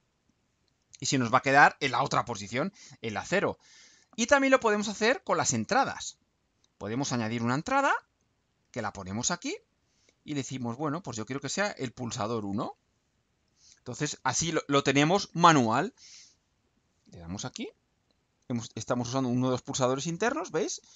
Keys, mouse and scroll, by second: 5.1 click, 7.1 click, 8.8 click, 10.3 click, 11.0 click, 12.1 ctrl+u.